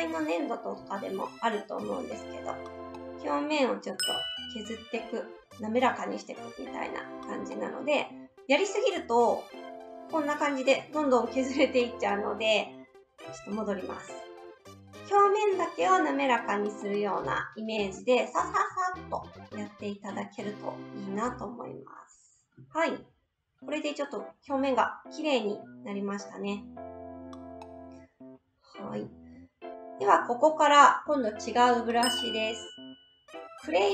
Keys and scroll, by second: 13.3 ctrl+z.